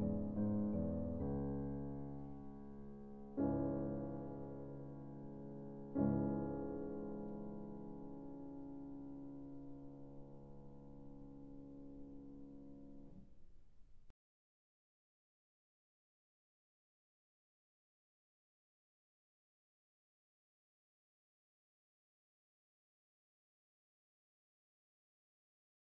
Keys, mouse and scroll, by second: 0.6 click, 8.1 click, 9.5 click, 11.3-11.9 scroll, 12.3-12.8 ctrl+scroll, 13.2-13.7 scroll, 14.3 scroll, 15.6-15.9 scroll, 16.3 ctrl+scroll, 18.8 scroll, 19.5 ctrl+scroll, 20.7 scroll, 21.6 middle click.